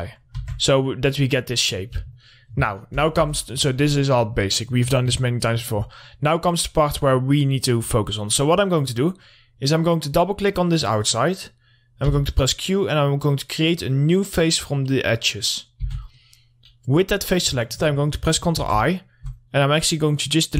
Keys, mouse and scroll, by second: 0.0 click, 0.8 Tab, 1.6 click, 5.1-5.7 scroll down 2, 5.7 alt+middle click, 6.7-8.4 scroll up 2, 9.1 click, 12.5 q, 13.3 click, 16.1 3, 16.4 click, 19.0 ctrl+i, 19.5 middle click.